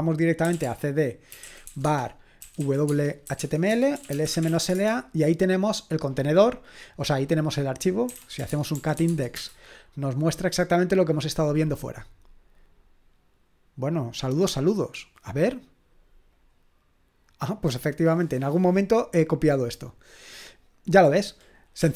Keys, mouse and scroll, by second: 0.0-5.0 typing, 7.8-9.5 typing, 16.3 click, 20.9 click, 21.5-21.9 typing.